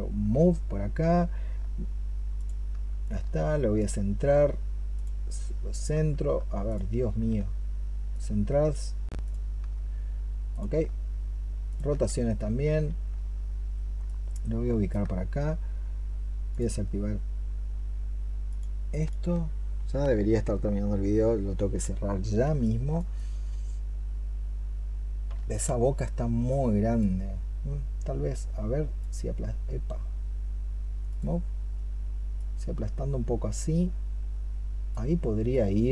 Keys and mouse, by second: 1.3 alt+click, 2.2 alt+click, 3.4 alt+click, 3.6 alt+click, 4.8 alt+click, 6.5 alt+click, 8.0 alt+click, 11.5 alt+click, 13.9 alt+click, 22.5 alt+click, 25.1 alt+l.